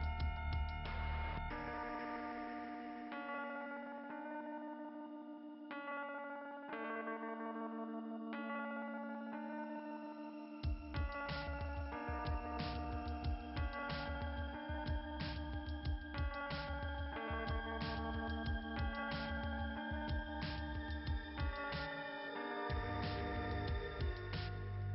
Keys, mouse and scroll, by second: 0.0 click, 1.6 click, 2.3 click, 3.4 click, 3.9 click, 6.0 click, 6.3 click, 10.6 click, 16.7 scroll down 1, 18.0 scroll down 1, 18.6 scroll down 1, 23.8 click, 24.1 click, 24.5 click.